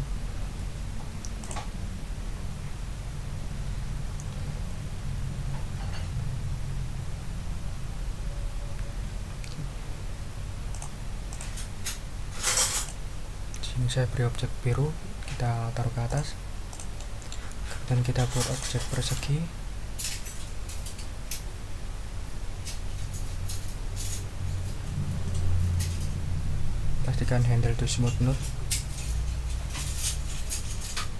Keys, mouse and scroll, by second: 1.4 click, 10.7 click, 11.3 click, 12.8 click, 16.1 click, 16.7 click, 16.9 middle click, 18.5 click, 18.9 middle click.